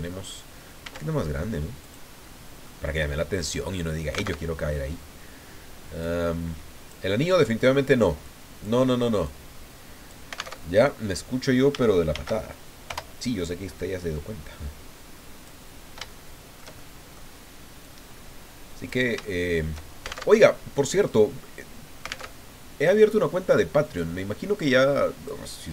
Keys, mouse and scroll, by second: 0.8 s, 1.8 click, 2.2 click, 4.3 alt+Tab, 5.1-5.7 scroll down 4, 6.0 click, 6.4 right click, 6.6 click, 7.3 click, 8.2 click, 9.2-10.3 drag, 10.6 alt+Tab, 12.1 shift+d, 12.9 Return, 13.8-15.6 drag, 16.2-17.3 shift+middle drag, 17.8-19.1 drag, 19.2 shift+click, 20.2 alt+shift+Tab, 22.3 alt+Tab, 23.5-25.4 drag.